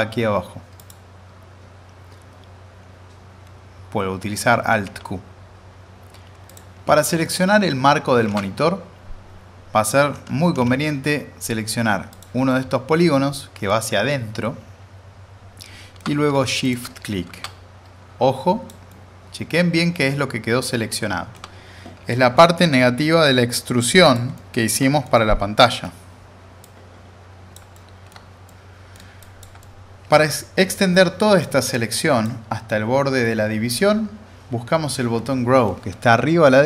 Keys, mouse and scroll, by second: 0.8 click, 4.7 alt+q, 6.5 click, 7.2 middle click, 8.3 alt+z, 8.3-9.9 drag, 10.5 w, 12.1 click, 12.5-16.2 alt+middle drag, 15.9 alt+middle click, 16.6 shift+click, 17.3 alt+z, 17.4-21.4 drag, 18.9-22.6 alt+middle drag, 22.6-24.1 drag, 24.3-26.1 alt+middle drag, 26.6-27.5 click, 27.7-28.3 alt+middle drag, 29.5 click, 29.6-30.2 alt+middle click, 31.7-32.3 drag.